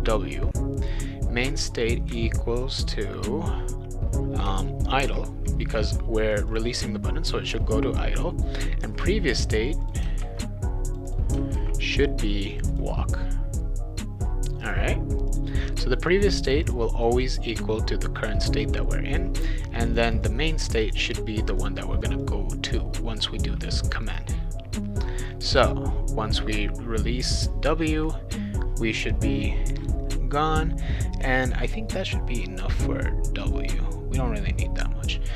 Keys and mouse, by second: 1.0 click, 1.6 click, 1.8 click, 4.7-5.6 typing, 6.3 click, 6.5 click, 9.7 click, 9.8 click, 10.2 ctrl+c, 10.9 click, 11.1 click, 11.5 ctrl+v, 12.5 click, 12.7 click, 14.6 click, 15.3 click, 15.8 click, 16.4 click, 16.6 click, 17.1 click, 17.2 click, 19.9 click, 20.1 click, 20.2 click, 20.7 click, 20.9 click, 21.4 click, 21.6 click, 22.0 click, 22.2 click, 24.0 click, 25.7-27.3 drag.